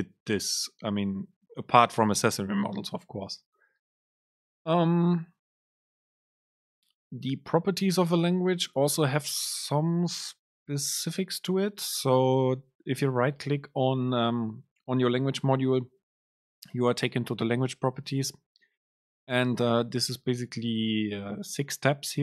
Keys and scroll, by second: 8.0 alt+Return.